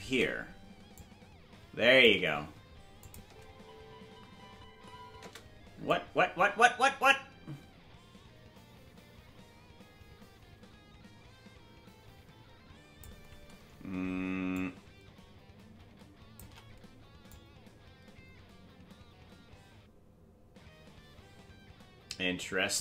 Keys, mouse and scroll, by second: 0.9-2.0 shift+drag, 3.0 click, 3.2 space, 5.8-13.0 drag, 5.8 space, 14.5-16.4 shift+drag, 17.3-22.7 drag.